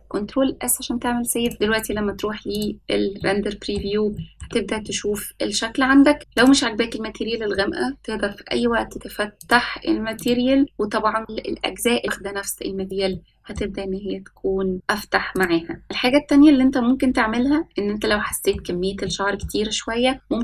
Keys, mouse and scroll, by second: 1.5 click, 2.6 click, 3.2-3.8 middle drag, 4.2 shift+middle drag, 4.8-5.2 scroll up 2, 6.4 click, 8.9 click, 13.9-14.3 middle drag, 15.8 click, 15.8 scroll up 3, 16.1-16.4 shift+middle drag, 16.7-17.1 scroll up 2, 18.6 scroll down 1, 19.0 shift+middle click, 19.8 middle click.